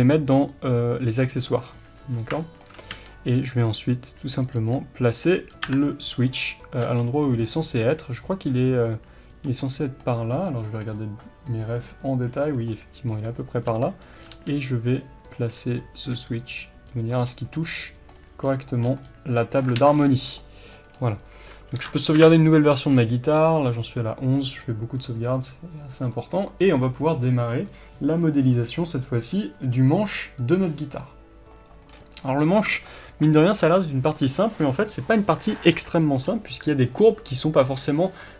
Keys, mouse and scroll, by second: 2.9 g, 4.3 click, 4.5 r, 5.2 click, 5.6 KP_7, 6.2 scroll down 1, 6.8 g, 9.4 click, 9.6-14.2 middle drag, 13.3 scroll up 2, 13.6 r, 14.2 click, 14.3 g, 15.3 click, 15.4 r, 16.0 click, 16.1 g, 17.1 click, 17.2 scroll up 1, 17.5-18.6 middle drag, 18.1 scroll down 1, 18.3 r, 18.6 click, 18.8 scroll down 1, 18.9-21.7 middle drag, 19.7 alt+a, 19.9 scroll down 1, 20.8 scroll up 1, 23.9-31.9 drag, 31.9 scroll down 1, 32.2-38.3 middle drag, 33.0-33.9 scroll up 1, 33.9 scroll down 1.